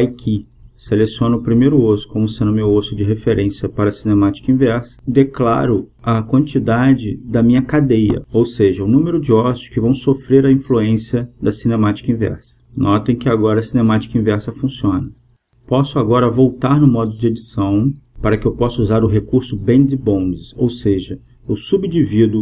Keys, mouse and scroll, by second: 1.3-3.1 drag, 3.2-5.1 drag, 6.7-9.3 drag, 9.0-10.7 right drag, 9.8 g, 16.3-18.0 right drag, 18.7-20.5 drag.